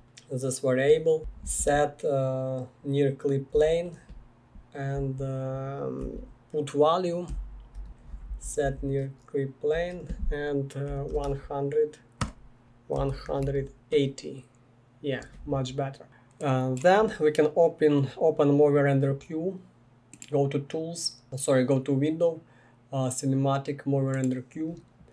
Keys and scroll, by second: 0.9-1.7 typing, 3.5 Return, 5.8-8.3 typing, 8.6 Down, 9.7-13.9 typing, 12.2 Return.